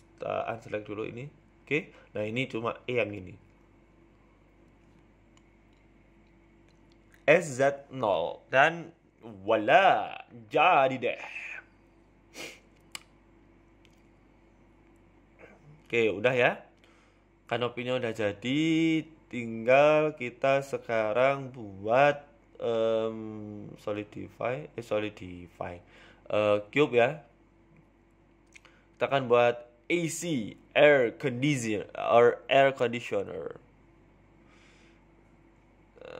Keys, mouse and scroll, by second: 3.3-4.1 scroll up 3, 3.7 e, 5.1 a, 5.2 z, 6.3 ctrl+z, 6.8 s, 8.0 g, 9.4 z, 10.1 middle click, 10.4 scroll down 4, 10.5 Tab, 10.7 middle click, 11.5 middle click, 12.2 KP_3, 12.8 s, 14.4-14.8 scroll down 3, 14.7 middle click, 16.6 middle click, 21.7 KP_1, 22.3 shift+middle click, 22.8-23.4 scroll up 2, 23.4 scroll up 2, 23.4 shift+a, 24.3 scroll down 3, 24.6 z, 25.5 shift+middle click, 26.0 g, 28.6 s, 29.4 shift+middle click, 29.6 scroll up 4, 30.3 g, 31.4 s, 33.1 g.